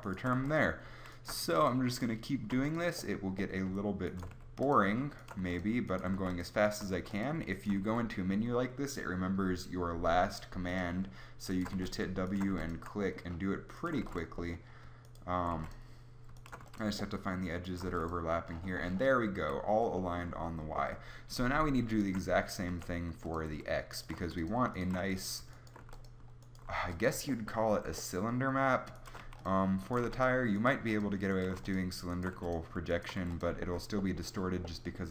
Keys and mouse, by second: 0.4 w, 1.4 w, 2.6 w, 4.3 w, 5.4 w, 6.1 w, 6.9 w, 7.9 w, 11.7 w, 12.5 w, 14.0 w, 15.6 w, 16.6 w, 17.9 w, 19.4 a, 22.7 w, 24.2 w, 25.0 w, 25.8 w, 26.7 w, 27.3 alt+middle click, 29.2-33.2 typing.